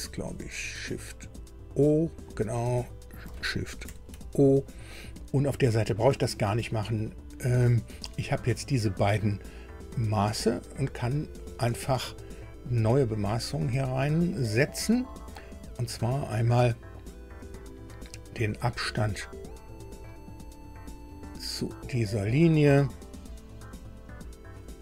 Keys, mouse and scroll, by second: 3.8 shift+o, 8.3 scroll down 2, 10.1 scroll down 2, 13.2-14.7 drag, 17.4 click, 20.8 click.